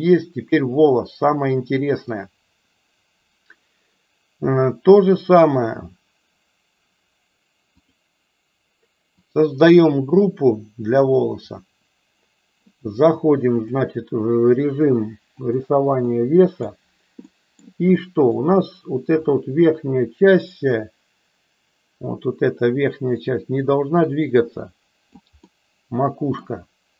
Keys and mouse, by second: 7.7 click, 9.2 click, 13.5-15.5 drag, 15.9 middle click, 17.3 middle click, 17.9 shift+middle click, 19.2-25.2 drag, 25.4-26.4 middle drag.